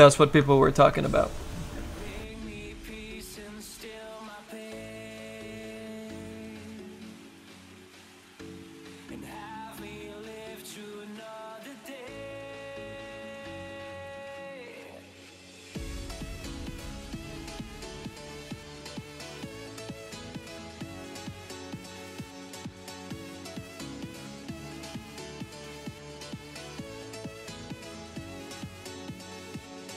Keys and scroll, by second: 3.1 s, 3.6 s, 4.9 s, 5.4 s, 8.4 s, 9.8 s, 10.4 s, 10.9 s, 17.9 s, 18.7 s, 20.6 s, 20.9 s.